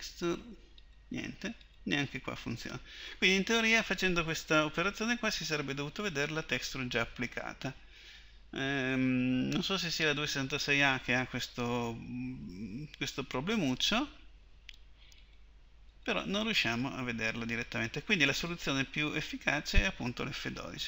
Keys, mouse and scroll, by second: 15.2 click.